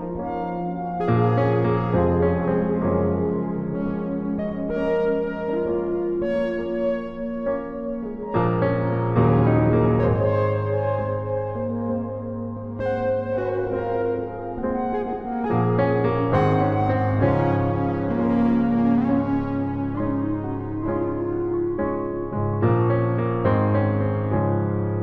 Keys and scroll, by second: 4.8 space.